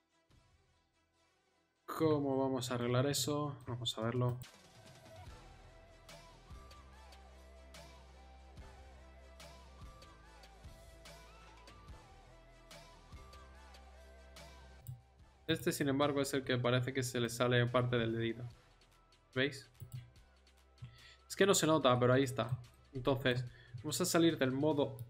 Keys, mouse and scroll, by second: 1.2 middle click, 3.4 middle click, 4.7 middle click, 4.8 r, 6.1 middle click, 6.5 r, 7.1 right click, 7.9 right click, 8.4 click, 9.3 click, 9.9 right click, 10.3 r, 10.8 right click, 13.1 right click, 14.1 r, 17.7 r, 18.8 r.